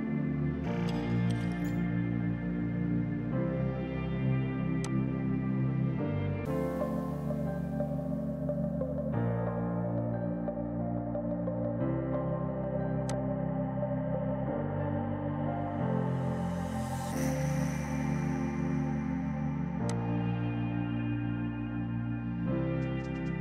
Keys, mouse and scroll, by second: 4.9 click, 9.7 ctrl+z, 11.2 ctrl+z, 13.1 click, 23.0 space.